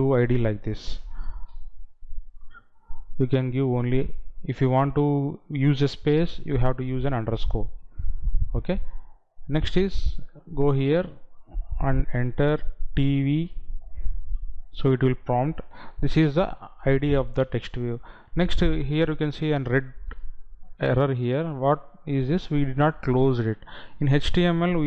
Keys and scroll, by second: 19.7 Right.